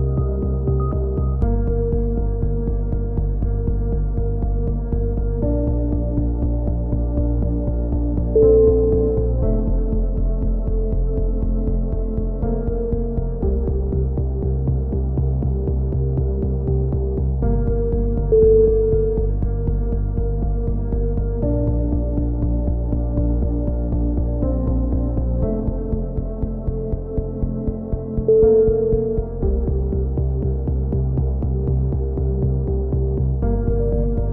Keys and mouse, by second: 0.2 right click, 0.7 KP_1, 0.8 z, 1.3 e, 1.7 click, 2.2 s, 2.8-3.8 drag, 3.7 a, 3.8 z, 3.9 z, 4.6 z, 4.8 click, 6.1 click, 6.2 KP_1, 6.3 z, 6.6 ctrl+r, 7.9 a, 8.0 z, 8.3 click, 8.8 z, 8.8 click, 9.6 ctrl+z, 9.8 c, 10.2-13.6 drag, 10.4 right click, 12.0 c, 12.2 right click, 13.6 click, 13.7 a, 13.8 z, 14.2 Tab, 14.4 click, 15.3 click, 15.4 KP_3, 15.6 z, 15.8 z, 16.2 click, 17.8 Tab, 18.0 z, 18.2 click, 19.0 click, 19.3 b, 19.7 b, 20.0-24.1 drag, 20.1 b, 20.6 KP_3, 21.3 ctrl+z, 23.8 c, 24.0 right click, 24.2-25.4 drag, 24.6 a, 25.3 z, 26.8 click, 27.1 KP_1, 27.1 z, 27.8 z, 28.0 Tab, 28.2 click, 29.1 Tab, 29.3 right click, 29.7 KP_3, 29.9 z, 30.6 click, 31.6 ctrl+z, 31.6 click, 32.3 a, 32.3 z, 32.8 click, 34.2 right click.